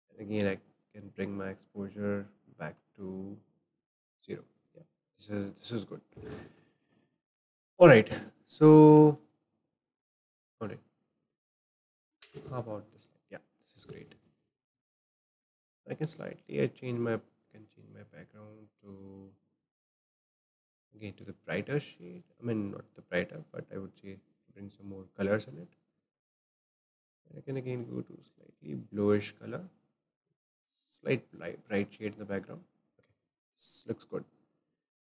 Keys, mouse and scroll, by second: 2.0-5.6 drag, 6.2-7.8 drag, 8.4 scroll up 1, 9.4 shift+middle click, 10.3 click, 11.2 click, 12.0 KP_0, 12.2 KP_0, 14.4 click, 15.3 click, 17.4-20.1 drag, 20.1-20.5 scroll up 3, 20.5-21.6 shift+middle drag, 21.6 click, 26.3-27.4 drag, 31.7 click, 32.5 click.